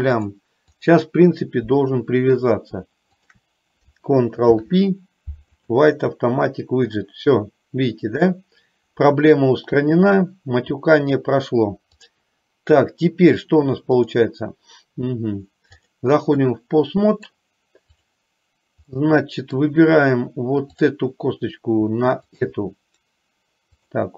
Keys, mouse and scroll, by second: 0.2-1.2 drag, 3.2 shift+click, 4.6 ctrl+p, 12.2 click, 14.1-16.2 drag, 16.6-17.6 middle drag, 19.1 middle click.